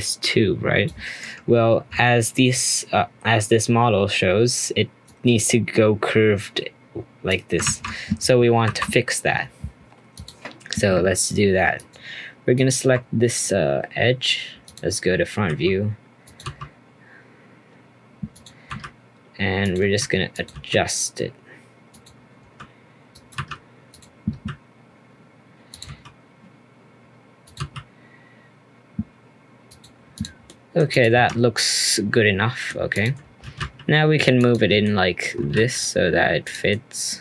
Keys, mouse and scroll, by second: 1.7 ctrl+z, 5.0-7.6 drag, 7.6 ctrl+z, 8.6 2, 10.1-11.9 drag, 12.5 alt+click, 14.6 click, 15.0-15.5 scroll up 2, 15.5 s, 16.4 g, 18.7 r, 19.8 s, 20.5 g, 23.3 r, 24.3 g, 25.8 s, 27.5 g, 30.1 click, 30.4 middle click, 30.9 click, 31.1 Tab, 31.3 scroll down 2, 31.5-32.9 middle drag, 32.9 click, 33.2 scroll down 2, 33.4 g, 34.8-35.4 shift+middle drag, 35.4 g, 36.7-37.2 middle drag.